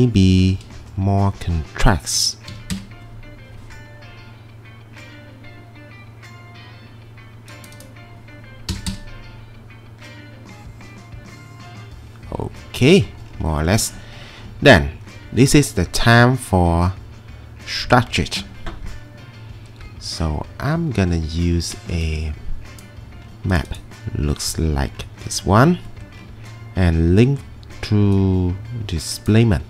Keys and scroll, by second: 2.3-3.0 typing, 8.7 typing, 8.9 Return.